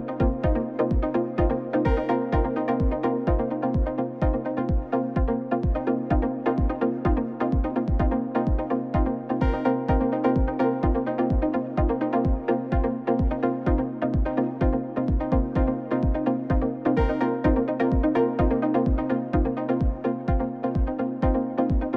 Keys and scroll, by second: 0.3 n, 2.8 i, 7.1 i, 14.6 5, 14.7 1, 14.8 Return, 16.2-17.2 typing, 17.2 Return.